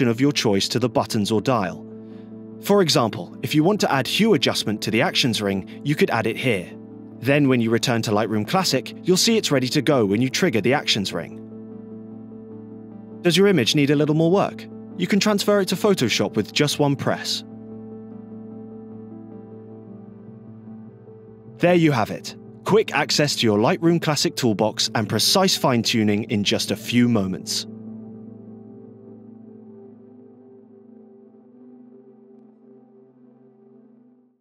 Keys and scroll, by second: 10.1 scroll, 11.0 scroll, 11.7 scroll, 12.3 scroll, 12.8 scroll.